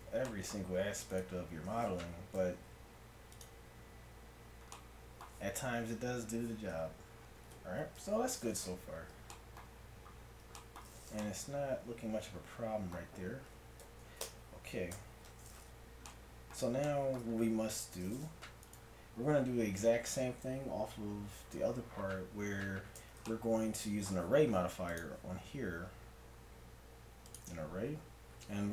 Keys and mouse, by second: 2.4 ctrl+f, 6.8 Tab, 8.0 KP_1, 13.8 KP_1, 14.3 Tab, 14.9 Tab, 18.7-20.6 right drag, 20.6-23.4 middle drag, 24.9-26.8 drag.